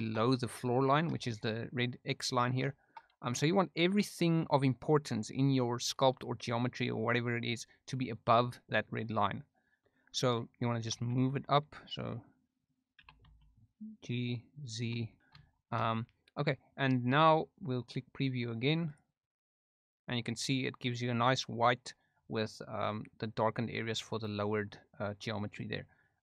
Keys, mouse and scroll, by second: 1.1 shift+middle click, 2.6 shift+middle click, 12.6 click, 12.9 g, 13.2 z, 14.6 click, 15.0 shift+middle drag, 15.4-16.0 shift+middle drag, 18.8 click.